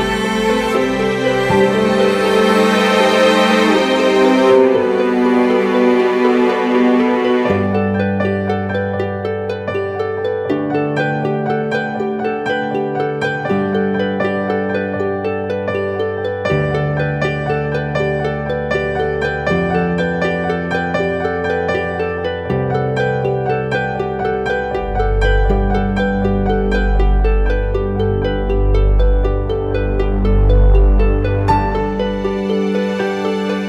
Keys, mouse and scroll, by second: 24.5 alt+click, 32.2-32.8 typing.